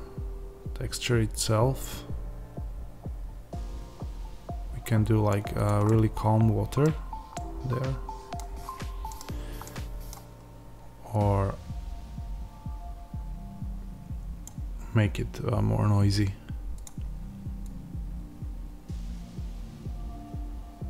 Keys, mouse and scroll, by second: 5.8-11.4 middle drag, 6.8-7.4 scroll down 2, 8.5-9.1 scroll up 2, 9.1-9.6 scroll down 2, 11.4-20.8 drag.